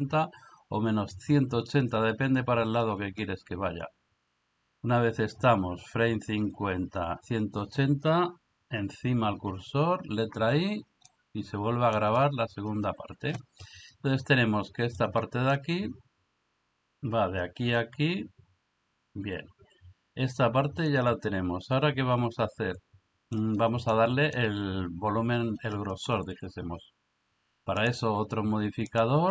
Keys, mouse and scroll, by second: 9.5 i, 11.1-12.0 middle drag, 15.0-23.3 drag, 23.9-24.4 middle drag, 28.9 click.